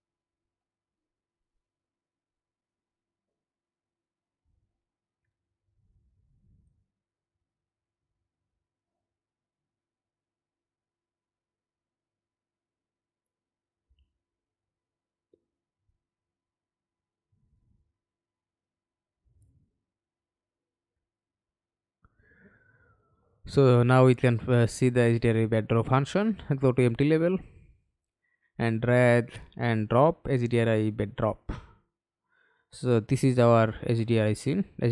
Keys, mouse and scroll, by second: 26.3 double click.